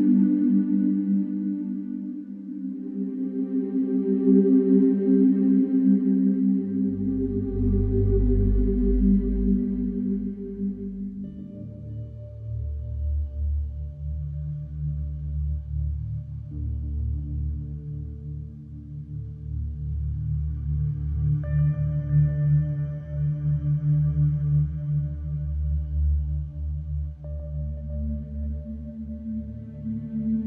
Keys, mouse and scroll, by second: 1.0-2.1 drag, 2.9 5, 3.4-4.5 Return, 6.2 click, 8.1 click, 9.4 click, 10.3 Escape, 12.1 click, 14.0 click, 15.3 Escape, 16.9 click, 18.6 click, 21.0-22.1 drag, 23.7-25.5 drag, 24.5 Escape, 26.8-27.9 drag, 28.8-29.9 drag.